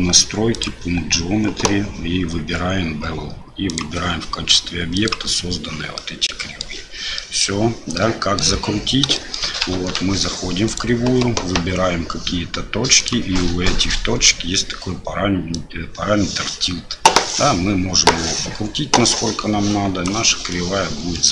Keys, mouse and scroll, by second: 0.6 click, 3.7 click, 6.0-6.6 middle drag, 7.1 middle drag, 7.9-8.4 middle drag, 9.1 shift+middle drag, 9.7 Tab, 10.7 click, 13.0 click, 15.6-20.0 drag, 20.5 middle click.